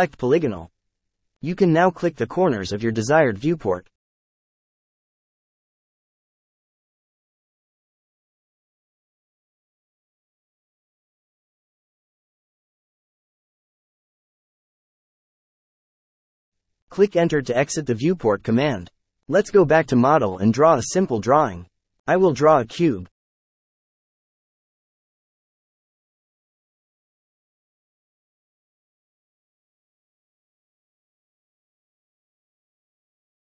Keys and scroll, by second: 17.2 space, 23.5-24.3 typing, 25.0 Escape, 25.9 l, 26.4 space, 28.5-30.1 typing, 32.0 5, 32.2 Return, 33.1 space.